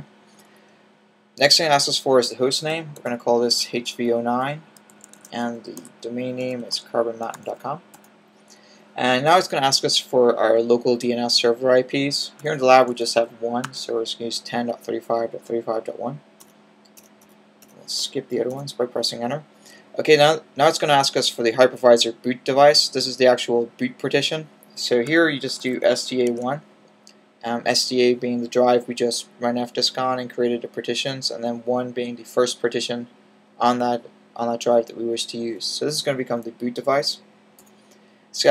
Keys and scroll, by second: 1.4-3.5 typing, 4.6-7.4 typing, 12.0-13.5 typing, 25.1-26.2 typing.